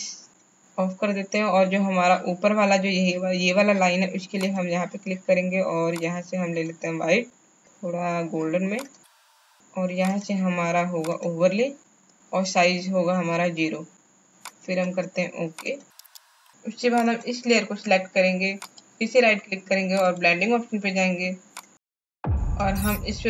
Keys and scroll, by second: 16.1 space.